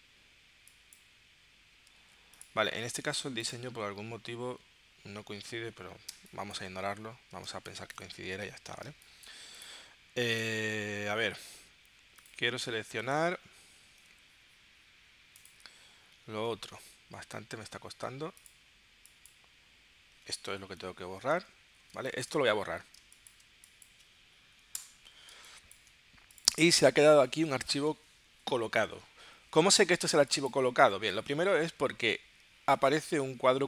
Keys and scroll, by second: 2.1 super+z, 6.1 space, 7.7 space, 8.8 space, 13.4 super+t, 15.8 super+y, 20.7 super+y, 21.9 space, 23.0 space, 24.8 BackSpace, 25.3 space, 30.1 space.